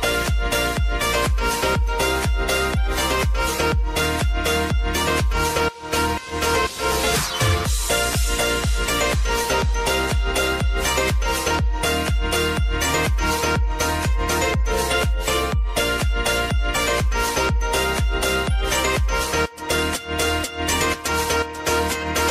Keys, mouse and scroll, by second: 1.9 ctrl+t, 2.5 click, 2.8 ctrl+a, 9.4 ctrl+a, 9.5-13.3 typing, 15.7 shift+o, 15.9 shift+n, 17.0 Return, 17.3-18.7 typing, 19.0 ctrl+a, 20.1-22.3 drag.